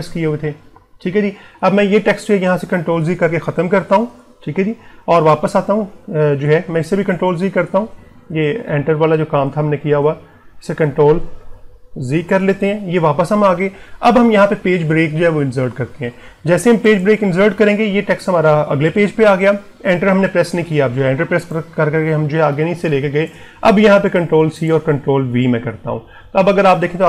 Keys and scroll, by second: 2.8 ctrl+z, 6.6 ctrl+z, 11.6 ctrl+y, 23.9 ctrl+c, 25.5 ctrl+v.